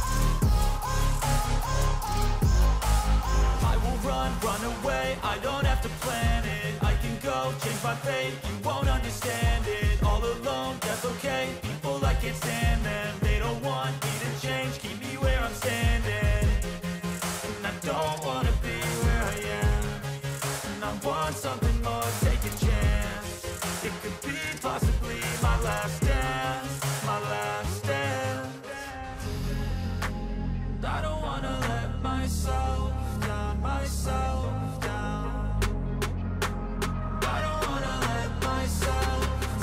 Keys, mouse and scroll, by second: 34.7-35.9 scroll down 12, 36.0 scroll up 1, 36.5-36.9 scroll up 11, 37.0-37.9 scroll down 5, 38.0 scroll down 2, 38.8 right click, 39.1 right click.